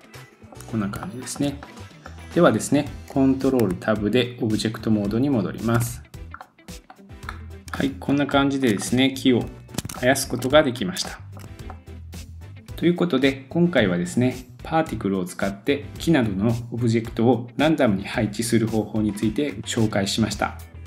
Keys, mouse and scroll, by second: 0.3 scroll up 2, 0.7 scroll down 2, 1.0 shift+middle click, 1.6-3.1 middle drag, 3.7 ctrl+Tab, 5.8-6.9 middle drag, 6.9 click, 7.0-9.6 middle drag, 7.2 scroll up 2, 9.5 scroll down 1, 9.7 middle click, 10.4-11.0 middle drag, 10.6-11.0 scroll down 1, 11.4-20.8 middle drag.